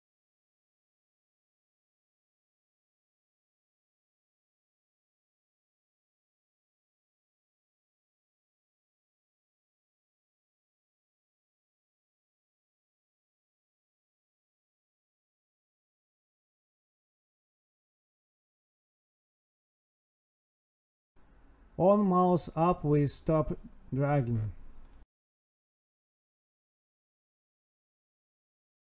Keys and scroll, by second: 0.2 Tab, 2.9 Escape, 3.4 alt+shift+Down, 3.5 Left, 5.4 Escape, 5.6 Right, 6.2 Right, 6.7 Escape, 6.8 Right, 8.1 End, 10.4 Tab, 11.3 Escape, 11.8 space, 12.3 Escape, 12.5 Right, 13.7 ctrl+s, 24.2 space, 24.3 space, 25.1 Right, 25.2 space, 26.1 Right, 26.4 Left, 28.7 Tab.